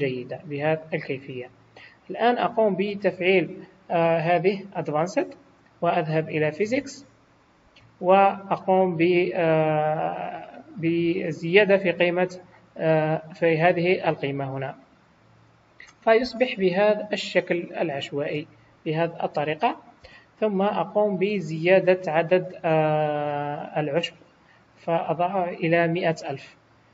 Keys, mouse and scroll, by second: 0.6 scroll down 2, 1.2 middle click, 5.0 click, 5.7 scroll down 2, 6.6 click, 6.6-7.4 scroll down 5, 14.3 click, 16.4 middle click, 20.0 KP_1, 21.3 scroll up 5, 24.7 click.